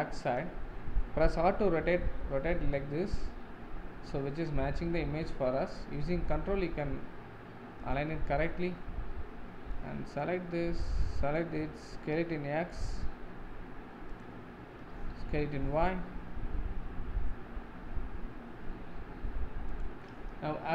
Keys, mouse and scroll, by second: 1.8 r, 10.2 click, 11.3 shift+click, 12.0 s, 14.9 s.